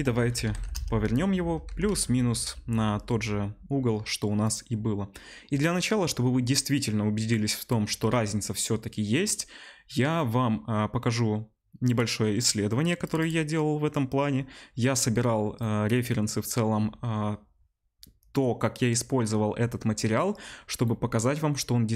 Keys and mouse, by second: 1.6 r.